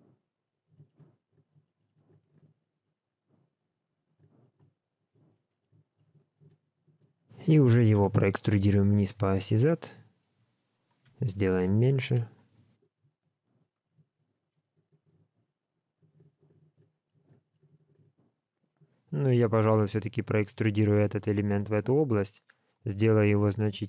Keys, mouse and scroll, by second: 0.0 ctrl+right click, 0.8 shift+click, 1.3 f, 1.6 shift+click, 1.7 shift+click, 1.8 shift+click, 2.0 f, 2.4 alt+a, 2.7 click, 3.8 click, 4.1-7.9 typing, 4.5 click, 5.0 click, 5.5 click, 9.5 e, 11.0 s, 12.8 KP_7, 13.8 scroll down 2, 14.0 shift+middle click, 15.4 right click, 16.0 a, 16.4 alt+z, 16.7 b, 17.3 g, 17.7 alt+a, 17.9 alt+z, 23.0 s.